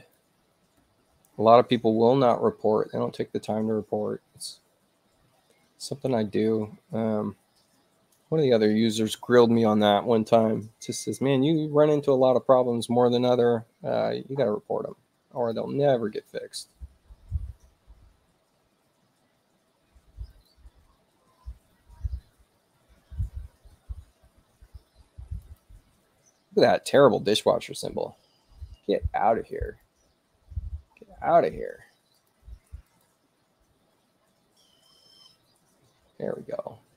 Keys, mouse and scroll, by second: 0.0 click, 8.8 click, 15.4 click, 20.3 click, 25.4 click, 29.6 click, 32.1 click, 32.9 click.